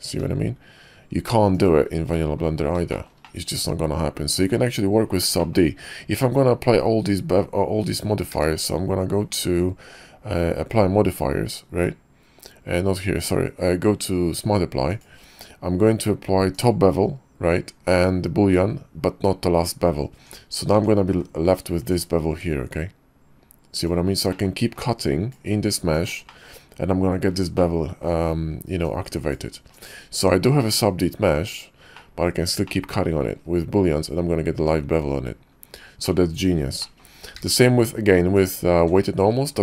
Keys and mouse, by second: 2.1 click, 2.1 right click, 2.9 shift+middle click, 3.2-4.5 middle drag, 5.4 middle click, 8.3 q, 16.5 click, 20.2 Tab, 20.7 Tab, 21.1 q, 24.3 middle click, 24.8-26.1 drag, 26.3 middle drag, 27.5-28.0 middle drag, 28.0 click, 28.0 right click, 28.8-29.9 drag, 30.2 Tab, 31.3 Tab, 31.9 drag, 32.6-33.2 drag, 36.0 click, 36.8 click, 37.4 q.